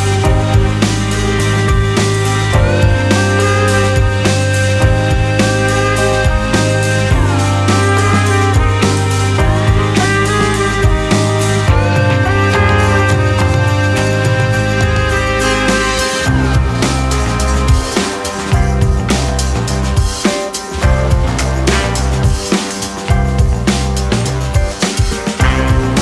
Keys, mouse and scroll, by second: 0.3 click, 1.1-1.8 scroll up 2, 1.8 1, 3.2-5.3 middle drag, 5.3 alt+z, 5.5-6.0 scroll up 1, 6.0 click, 6.7 click, 7.9-8.7 scroll down 4, 8.7 middle click, 9.5-9.8 scroll up 2, 9.8-11.2 shift+middle drag, 11.2 click, 12.1-14.0 drag, 14.0-15.6 scroll up 1, 16.4 Tab, 17.4 click, 18.2-19.0 shift+middle drag, 19.0 click, 20.8 click, 21.2 click, 21.9-23.5 drag, 23.5-25.0 scroll down 5, 25.0 click.